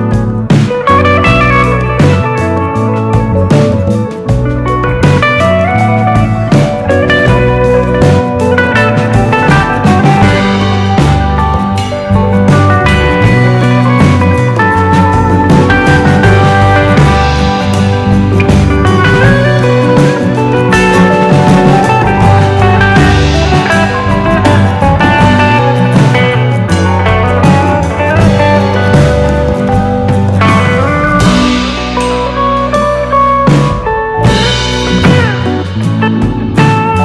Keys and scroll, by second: 8.1 super+c, 8.3 super+v, 15.8 BackSpace.